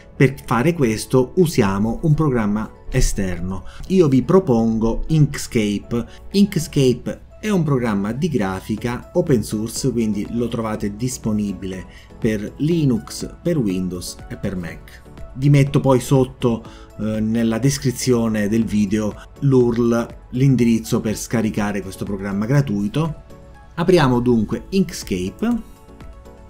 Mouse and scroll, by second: 24.9 click, 25.5 click.